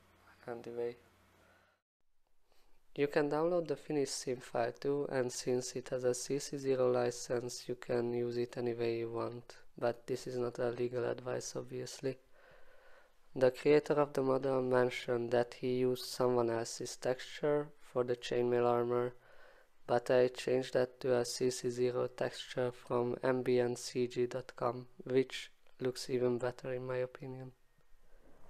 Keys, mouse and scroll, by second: 1.1 click.